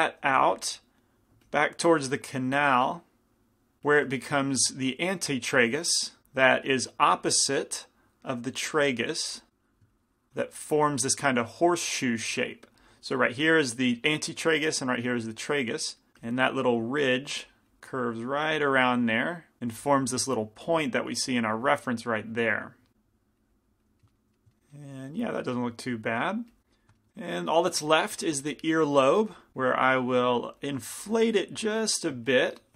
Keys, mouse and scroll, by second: 0.6 f, 1.2-3.8 drag, 1.5 f, 3.9 f, 6.6-12.4 drag, 16.3 f, 16.9-19.6 drag, 19.6 f, 22.9 f, 23.5-25.0 drag, 25.0-26.7 middle drag, 26.7-27.9 drag, 27.9 f, 28.6 f, 29.5 f.